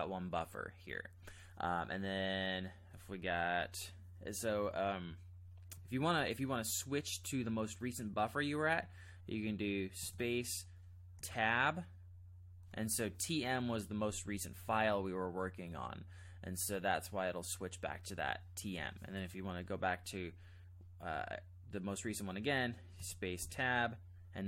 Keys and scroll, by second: 10.0 space, 11.4 Tab, 23.0 space, 23.4 Tab.